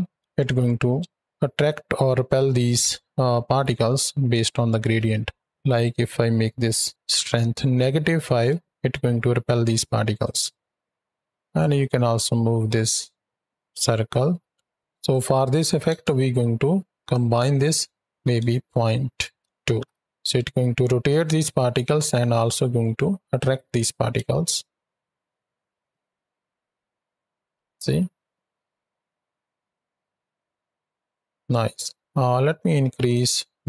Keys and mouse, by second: 0.0 shift+Right, 0.0 shift+Left, 0.9 space, 4.9 space, 5.4-6.9 drag, 6.9 shift+Right, 7.0 shift+Left, 8.4 space, 10.1 drag, 14.8 alt+g, 14.8 space, 14.8 click, 16.8-18.8 drag, 19.5 shift+Right, 19.7 shift+Left, 24.1 space, 31.2 space, 33.0 click.